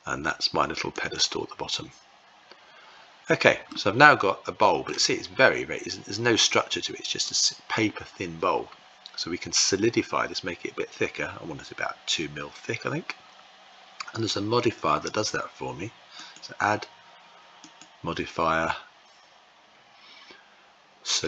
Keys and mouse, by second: 3.4-4.6 middle drag, 15.9 click, 17.4-21.2 drag.